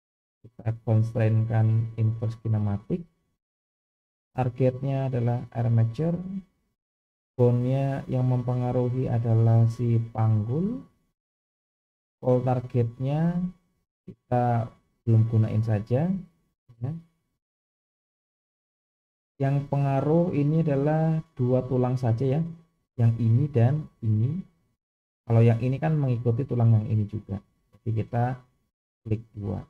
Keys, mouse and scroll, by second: 0.4-2.4 drag, 4.5 click, 7.1-10.6 drag, 14.6-15.7 scroll down 1, 19.0-20.1 scroll down 2, 22.1-23.2 scroll down 1, 28.8 click, 29.1 click.